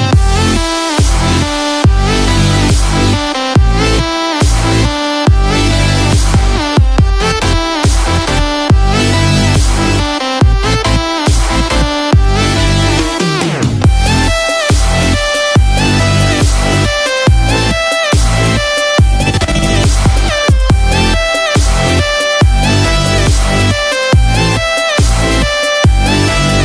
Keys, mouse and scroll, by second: 3.8 alt+click, 5.5 g, 11.2 shift+middle click, 13.2 Tab, 13.5 click, 15.3 Tab, 16.3 ctrl+r, 19.3 alt+click, 20.6 g.